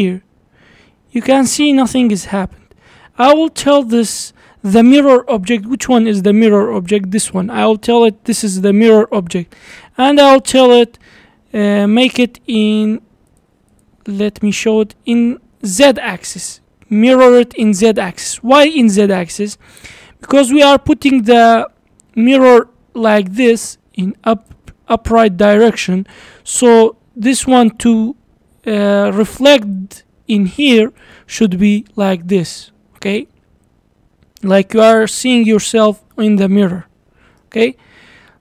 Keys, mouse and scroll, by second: 6.7 click, 12.1 click, 12.7 click, 13.3 click, 13.7 click, 15.9-18.9 middle drag, 20.2-21.6 middle drag, 21.6 scroll up 1, 21.9-22.6 d, 22.7-24.5 drag, 24.5-25.1 d, 25.2-25.7 drag, 25.7-27.4 d, 27.6-29.1 drag, 29.1-29.8 d, 29.8-31.0 drag, 31.0-31.5 d, 31.6-32.7 drag, 32.7 d, 33.3-36.1 middle drag, 36.1 d, 36.3-37.4 right drag, 37.4 d, 37.6-38.4 middle drag.